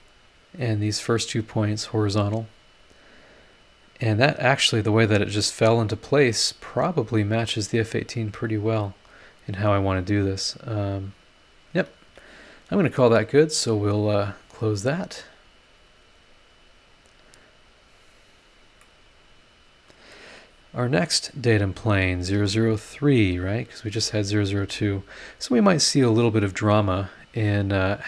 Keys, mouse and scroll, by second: 0.0 click, 1.2 click, 1.4 h, 9.6-12.0 drag, 16.9 click, 17.6 click, 18.5 scroll down 1, 18.8-20.3 middle drag, 21.4 click, 22.0 click, 22.3 space, 23.6 click, 23.9 space, 24.6 space.